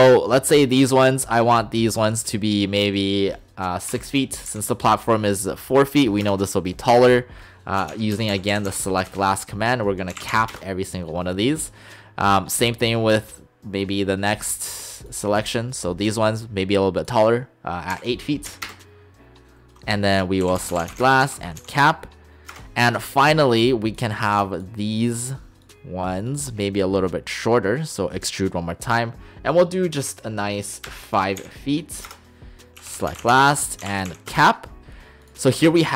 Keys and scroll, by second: 3.9 6, 4.5 Return, 7.8-8.7 typing, 9.1 Return, 9.9-10.7 typing, 17.9 8, 18.5 ', 18.7 Return, 20.4-21.7 typing, 22.5 Return, 30.9 5, 31.4 ', 32.1 Return, 32.8-34.4 typing, 33.5 Return.